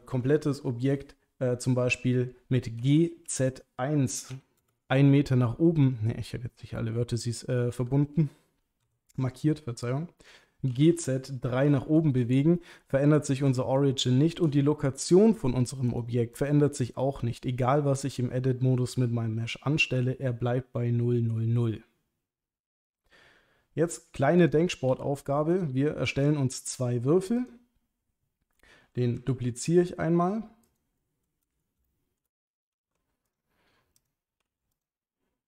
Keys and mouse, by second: 0.2 Tab, 2.8 g, 3.3 z, 4.3 KP_1, 4.6 KP_Enter, 8.9 a, 10.7 g, 10.8 z, 11.6 KP_3, 12.0 Return, 13.8 shift+middle click, 16.0 click, 24.5 click, 24.9 Delete, 25.2-25.5 middle drag, 26.1 shift+a, 29.3 shift+d, 30.6 click, 31.0-31.5 middle drag, 31.9-32.2 shift+middle drag, 32.7 g, 32.8 z, 33.3 click, 34.0 click, 34.4 g, 34.7 click.